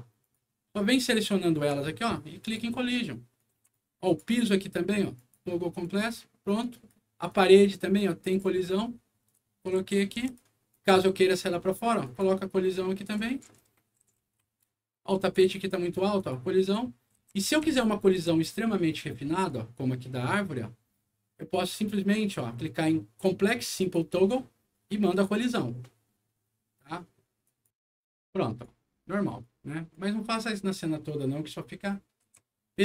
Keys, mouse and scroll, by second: 0.2 click, 0.9 ctrl+click, 2.4 ctrl+click, 3.3 ctrl+right click, 3.5 a, 4.0 click, 5.1 click, 5.8 click, 6.6 right click, 7.2 click, 8.3 click, 9.2-10.3 right drag, 9.3-10.7 typing, 10.7 click, 12.0 click, 13.0-14.6 right drag, 14.0 s, 14.4 q, 15.1 click, 16.1 click, 17.0-19.1 typing, 17.0-18.5 right drag, 19.0 right click, 20.2 click, 23.8 click, 25.1 click, 27.4 click, 28.4 click, 29.4 right click, 30.8-32.8 right drag, 32.4-32.8 typing.